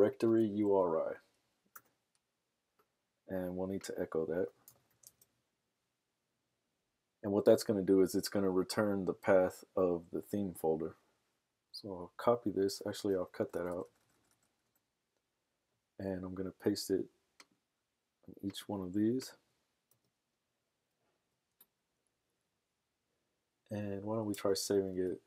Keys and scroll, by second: 0.1 typing, 4.3-5.4 typing, 6.7 typing, 11.6 super+c, 13.0 super+x, 13.5 BackSpace, 13.8 BackSpace, 14.3 BackSpace, 14.6 BackSpace, 19.9 super+v, 24.3 super+s, 25.0 super+Tab.